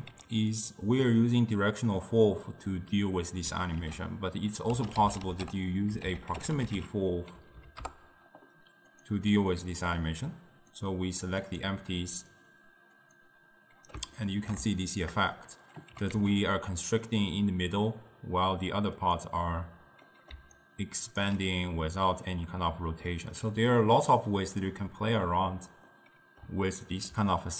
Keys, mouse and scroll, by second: 0.2 g, 1.2 click, 2.0-3.9 middle drag, 3.9 ctrl+a, 7.6 Down, 9.6-11.7 drag, 14.3-16.0 ctrl+middle drag, 16.0 g, 20.1-20.6 middle drag, 20.6 right click, 21.3 d, 22.4 d, 24.2-26.0 drag, 26.0-27.5 middle drag.